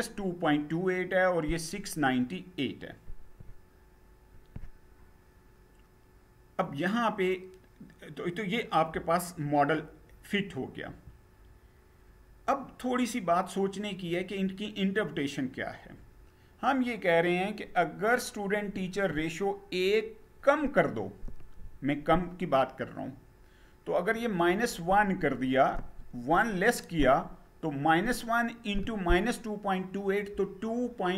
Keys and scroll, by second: 10.5 Down.